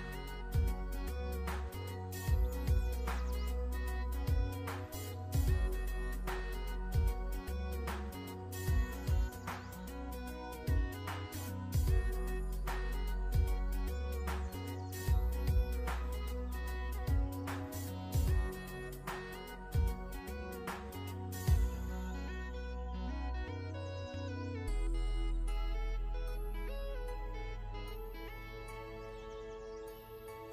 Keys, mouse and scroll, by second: 1.0 o, 2.0-2.8 typing, 3.2 Return, 4.9 o, 5.6 Return, 6.4-7.8 typing, 7.9 Return, 10.8 o, 11.2 Return, 12.2-13.7 typing, 13.1 Return, 14.5 Return, 15.5 o, 15.8 p, 16.2 Return, 16.4 p, 18.5-19.5 typing, 19.7 Return, 20.8 o, 21.2 Return, 22.1-23.0 typing, 23.4 Return, 24.8-27.7 typing, 25.5 Return, 26.4 Return, 27.7 Return, 28.6 Return, 29.7-30.5 typing.